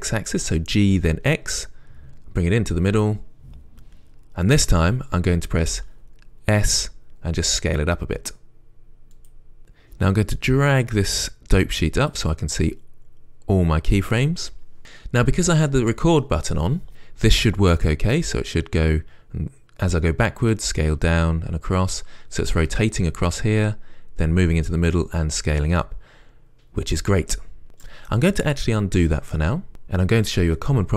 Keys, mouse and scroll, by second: 3.2 g, 3.3 click, 7.0 s, 9.5 s, 9.6 click, 11.1-18.2 drag, 18.2-30.9 right drag, 29.7 ctrl+z.